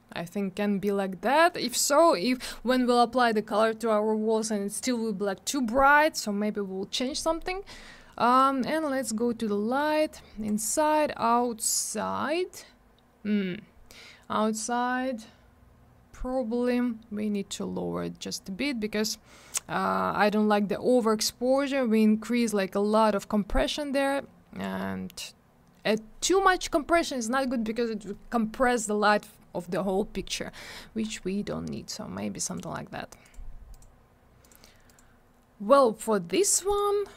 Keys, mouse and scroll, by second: 8.3 click, 8.4 click, 10.4 click, 10.5 click, 17.3 click, 21.5 click, 32.5 click, 32.5 click, 33.2 click, 33.3 click, 33.7 click, 33.8 click, 34.4 click, 34.5 click, 34.9 click, 34.9 click, 36.3 click, 36.3 click, 36.7 click, 36.7 click.